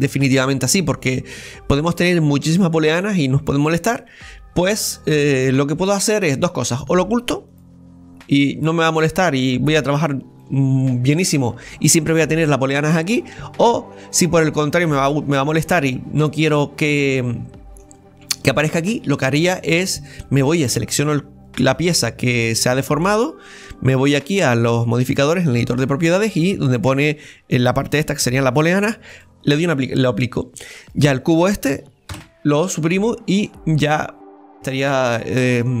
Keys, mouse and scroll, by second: 7.5 click, 8.3-9.9 middle drag, 9.9 scroll up 1, 10.4 middle click, 11.1-13.6 scroll down 2, 13.6 scroll down 3, 13.6-14.9 middle drag, 14.9 click, 15.7 click, 16.5-16.8 scroll up 2, 16.8-18.9 middle drag, 18.9-24.1 right drag, 24.1-27.1 drag, 29.1-30.8 drag, 30.8-32.1 right drag, 33.0 scroll up 2, 33.3-35.8 middle drag.